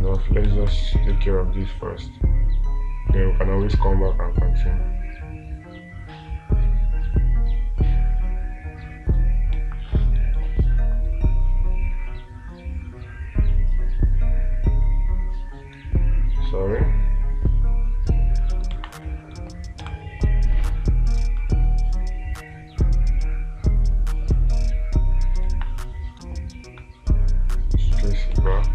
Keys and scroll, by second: 0.9 space, 10.0 space, 19.2 space, 21.0 ctrl+z, 25.9 space.